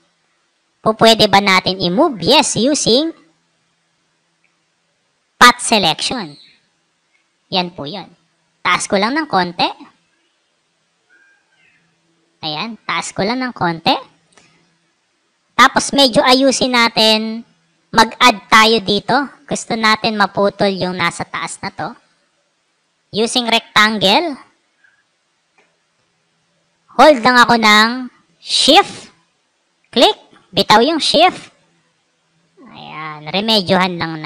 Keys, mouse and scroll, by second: 0.3 right click, 0.9 click, 1.6-4.3 drag, 8.0-8.6 drag, 9.1-11.5 drag, 14.7 click, 22.5 right click, 23.6 click, 29.6-34.2 shift+drag.